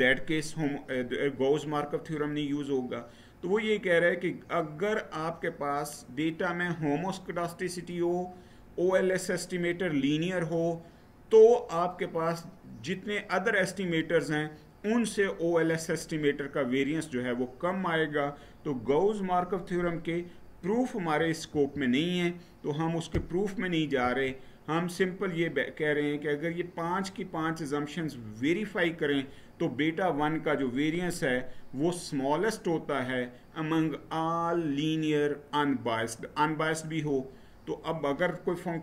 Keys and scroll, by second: 21.3 Right, 23.8 Right.